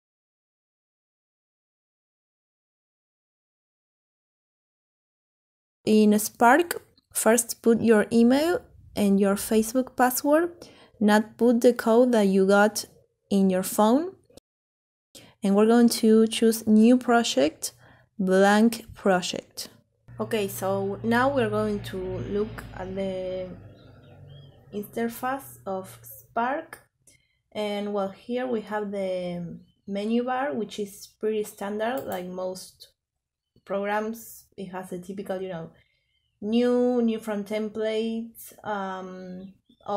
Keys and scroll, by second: 0.0-0.9 typing.